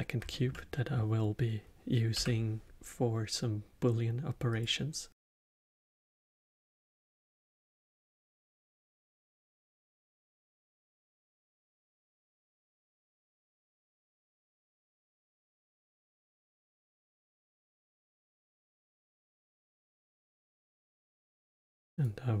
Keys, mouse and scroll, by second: 0.2-2.1 alt+middle drag, 2.1 n, 4.4 click, 5.1-6.0 scroll down 2, 6.0-11.6 drag, 12.5-18.5 drag, 18.6-20.0 scroll down 3, 20.0 click, 20.8-22.4 drag.